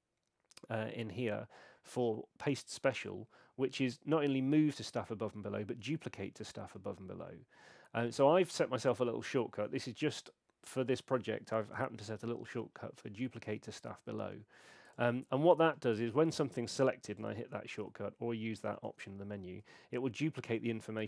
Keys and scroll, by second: 17.4 alt+shift+d, 18.8 alt+shift+d, 19.6 alt+shift+d.